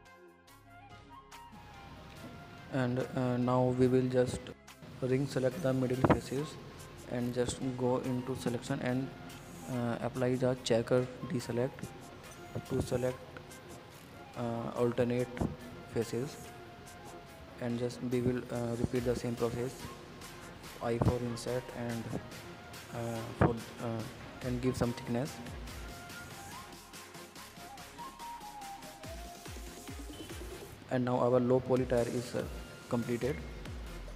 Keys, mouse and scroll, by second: 0.0 middle click, 0.1 scroll down 3, 0.3-0.9 middle drag, 0.9 scroll down 1, 1.1 middle click, 1.5 Tab, 1.8 click, 2.0-2.4 scroll up 5, 2.4-2.9 middle drag, 2.9 scroll up 1, 3.1-3.6 middle drag, 3.6 scroll down 3, 3.8-4.7 middle drag, 4.7 scroll up 2, 4.9 Tab, 5.0 middle click, 5.6 click, 5.9-7.2 middle drag, 7.2 alt+click, 7.6-9.1 middle drag, 9.2-10.5 middle drag, 10.5-11.7 drag, 11.7 middle click, 12.1 scroll up 2, 12.3-13.8 middle drag, 16.7-18.2 drag, 18.8-19.9 middle drag, 19.9 click, 20.6 middle click, 20.7 scroll down 3, 20.9-21.7 middle drag, 21.7 Tab, 21.9 click, 22.0 click, 22.1 middle click, 22.5 scroll up 3, 22.7-23.6 middle drag, 23.6 scroll down 2, 23.8 middle drag, 24.1 scroll up 1, 24.2-24.7 middle drag, 24.7 click, 25.1 Tab, 25.2 click, 25.7-27.1 middle drag, 27.1 scroll down 3, 27.2 middle click, 27.8 scroll up 3, 28.1-28.8 middle drag, 28.8 scroll up 2, 29.0-29.7 middle drag, 29.7-30.1 scroll down 4, 30.1 click, 30.6 click, 31.6 click, 32.2 click, 33.3-34.1 drag.